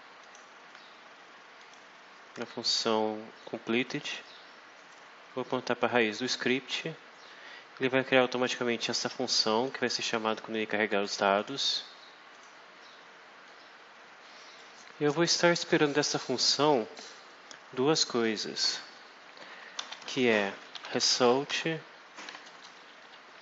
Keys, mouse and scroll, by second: 0.1 click, 1.5 click, 4.7 click, 8.3-9.7 drag, 11.3 click, 12.2 click, 13.3-14.7 drag, 19.4-23.4 typing, 22.4 Return.